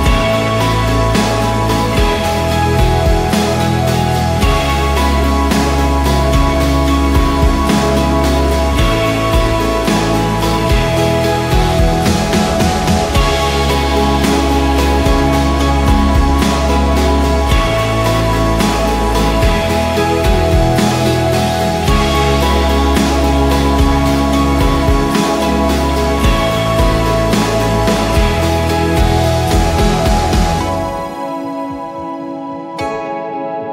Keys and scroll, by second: 0.0-0.5 typing, 0.2 ctrl+a, 1.0 ctrl+d, 2.5 ctrl+a, 2.5-3.7 typing, 4.6 ctrl+t, 7.5 Return, 9.0 Right, 9.4 Left, 9.6 BackSpace, 9.9 Return, 14.1 2, 16.3 ctrl+a, 16.9 ctrl+d, 17.6-18.7 typing, 20.3 ctrl+t, 21.5 Return, 21.8 ctrl+a, 22.4 ctrl+d, 26.1 ctrl+[, 26.3 ctrl+[, 26.4 ctrl+[, 26.6 ctrl+[, 26.7 ctrl+[, 26.8 ctrl+[, 26.9 ctrl+[, 27.0 ctrl+[, 27.1 ctrl+[, 27.2 ctrl+[, 27.3 ctrl+[, 27.4 ctrl+[, 27.5 ctrl+[, 27.6 ctrl+[, 28.4 ctrl+], 28.6 ctrl+], 29.8 ctrl+j, 31.5 ctrl+j, 32.9 ctrl+j.